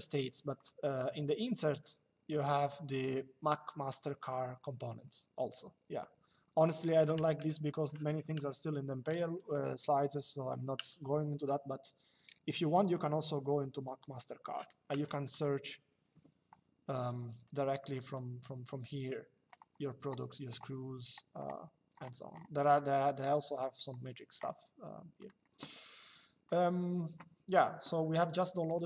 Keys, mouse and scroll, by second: 0.3 click, 2.3 click, 15.0 click, 17.2 click, 24.9 click, 26.2 click, 28.4 click.